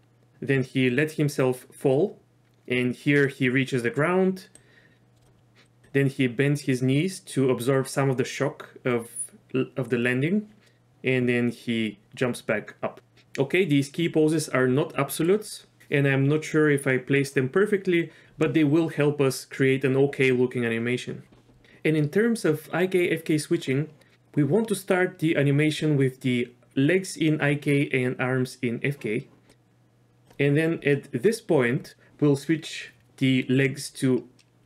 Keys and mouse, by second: 4.7 click, 5.6 click, 5.9-13.0 drag, 23.9-25.1 drag, 29.5-30.4 drag.